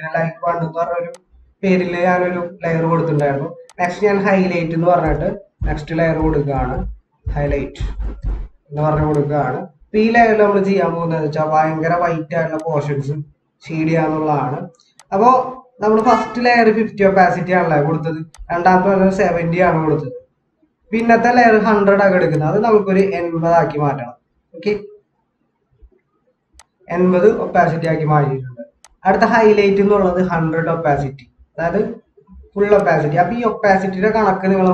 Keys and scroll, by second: 5.1-8.7 typing, 13.2 ctrl+-, 14.2 ctrl+=, 15.7 ctrl+-, 31.5 ctrl+=, 32.2 ctrl+=.